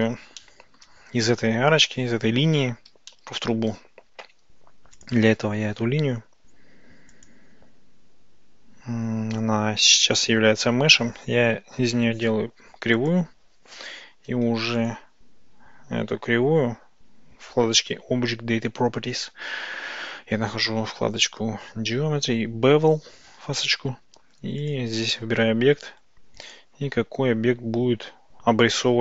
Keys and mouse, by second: 0.4-0.9 shift+drag, 3.2-3.6 shift+drag, 5.0 click, 7.2-13.2 drag, 21.2 click, 24.6 click, 26.5-29.0 drag.